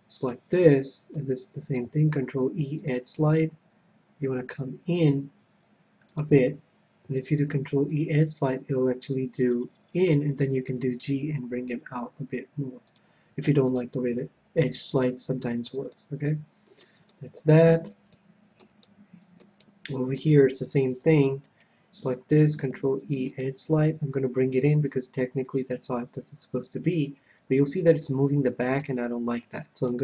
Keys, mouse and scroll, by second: 1.1 right click, 2.5 ctrl+e, 6.4-8.2 drag, 7.5 ctrl+e, 10.3-12.0 drag, 11.1 g, 13.2-15.0 drag, 13.7 a, 13.9-21.5 middle drag, 21.8-23.6 right drag, 23.0 ctrl+e, 29.0-30.0 right drag.